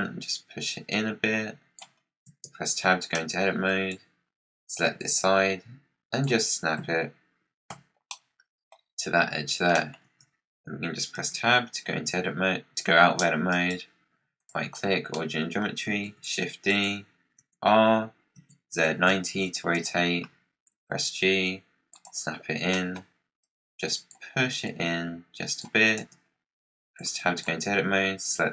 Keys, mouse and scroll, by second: 1.9 scroll down 6, 2.2 Tab, 3.0 middle click, 3.6 click, 4.1 scroll down 5, 4.9 click, 6.7 KP_Decimal, 8.0-11.1 middle drag, 11.1 Tab, 13.4-14.8 right drag, 14.8 scroll down 6, 15.0 middle click, 16.0 shift+d, 17.3 r, 20.6 g, 22.6-23.3 middle drag, 23.3-24.0 scroll down 1, 24.0-24.6 scroll down 1, 24.6 click, 25.9 Tab, 26.2 scroll down 5, 26.9 click, 28.2 click.